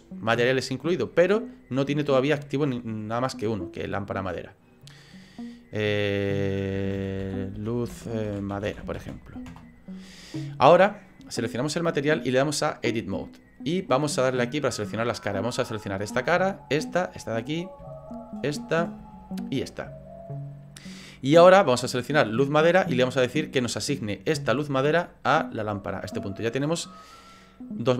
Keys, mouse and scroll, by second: 16.5 shift+right click, 17.2 middle click, 18.3 shift+right click, 18.6 middle click, 19.4 shift+right click, 19.7 middle click.